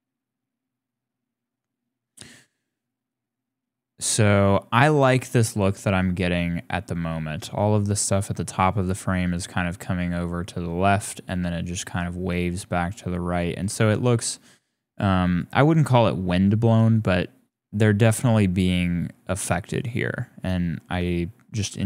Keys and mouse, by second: 15.2 click, 16.9 click, 20.0 click, 21.2 shift+click, 21.6 click.